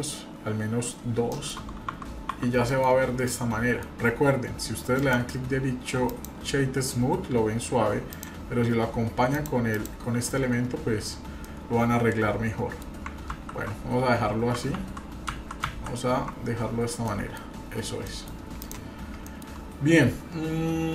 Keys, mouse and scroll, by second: 1.3 middle click, 1.9 F4, 2.8-3.3 scroll down 3, 3.2-3.8 middle drag, 3.9 scroll up 2, 5.0-6.3 right drag, 8.1 click, 9.4 click, 10.9-11.4 scroll down 1, 11.4-12.8 middle drag, 13.3 ctrl+z, 14.8 ctrl+z, 15.3 ctrl+z, 15.7 ctrl+z, 17.0-17.4 middle drag, 17.5 scroll down 1, 18.0 middle click, 18.6 drag, 19.2 shift+middle click, 19.6 scroll up 1, 20.2-20.9 scroll down 3.